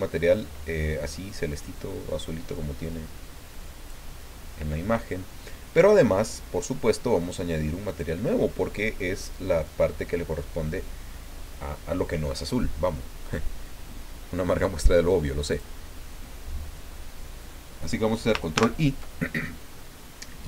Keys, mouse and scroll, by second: 1.5-4.1 drag, 7.9 click, 15.5 click, 18.5 ctrl+i.